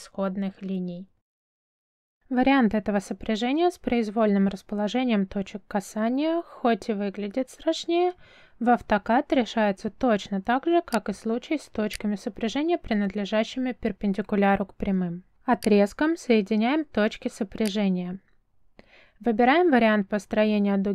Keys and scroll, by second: 13.5 l, 14.1 space, 18.7 space.